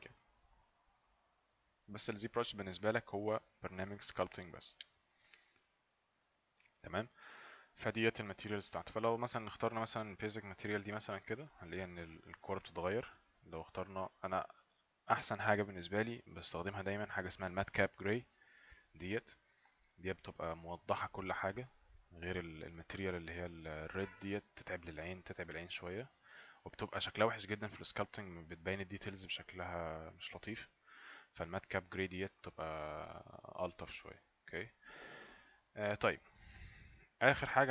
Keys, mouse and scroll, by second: 11.1 click, 13.8 click, 18.2 click, 20.0 click, 22.8 right click, 22.8 click, 28.6 click, 31.0 click, 31.7 right click.